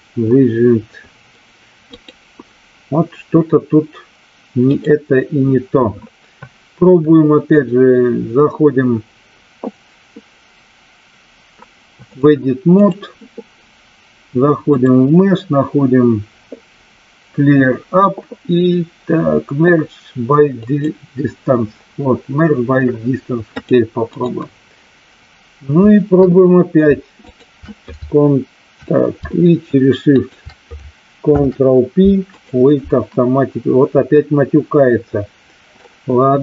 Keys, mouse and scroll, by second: 1.8 click, 12.1-12.9 drag, 14.8-20.9 drag, 23.5-24.1 drag, 30.0 shift+click, 31.1 ctrl+p.